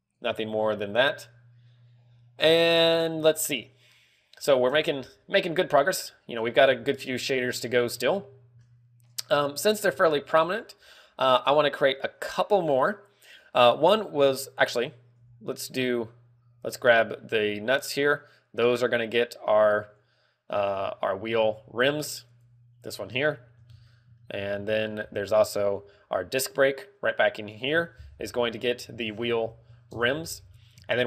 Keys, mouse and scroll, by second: 3.1 click, 3.7-4.1 scroll down 4, 4.0 middle click, 6.2 scroll down 2, 6.6 shift+middle click, 7.1 scroll down 2, 7.4 shift+middle click, 7.9 ctrl+w, 8.6 shift+middle click, 10.2 scroll down 1, 10.6 middle click, 15.7 right click, 16.0 z, 18.5 click, 23.9 shift+middle click, 24.2 scroll up 4, 24.7 shift+middle click, 25.0-25.6 scroll up 3, 25.2 z, 26.7 right click, 26.8 z, 28.1 click, 29.7 scroll up 4.